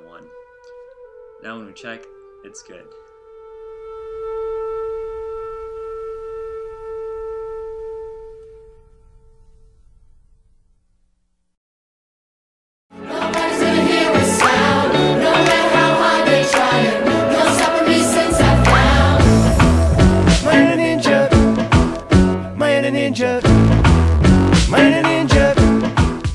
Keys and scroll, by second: 0.5 Tab.